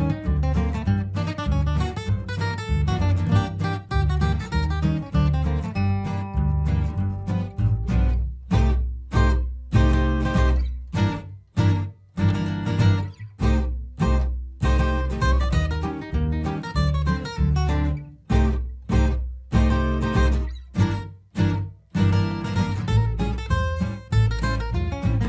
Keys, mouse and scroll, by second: 8.5 right click, 9.3 click, 11.1 ctrl+space, 11.4 typing, 11.6 ctrl+click, 12.1 ctrl+right click, 12.8 alt+click, 13.5 ctrl+g, 13.9 shift+click, 14.1 c, 14.4-19.1 shift+drag, 19.1 ctrl+right click, 20.3 shift+click, 21.2-22.9 typing, 22.1 shift+click, 22.8-24.5 drag, 24.8 ctrl+r.